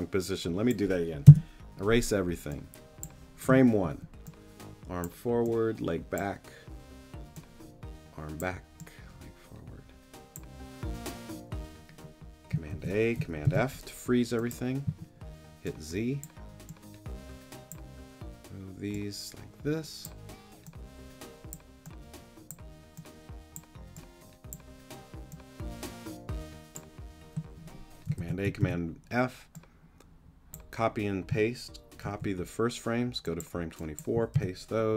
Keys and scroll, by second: 1.2 BackSpace, 3.8 z, 12.7 super+a, 13.4 super+f, 14.8 z, 28.2 super+a, 28.6 super+f, 32.0 super+c, 34.3 super+v.